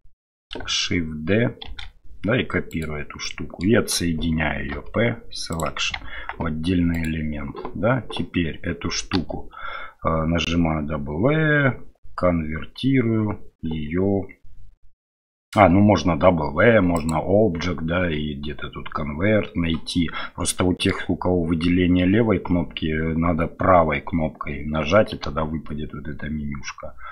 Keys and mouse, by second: 1.6 shift+d, 3.2 middle click, 4.7 p, 6.1 Tab, 6.9 click, 9.1 w, 17.0-19.8 right drag, 20.5-20.9 middle drag.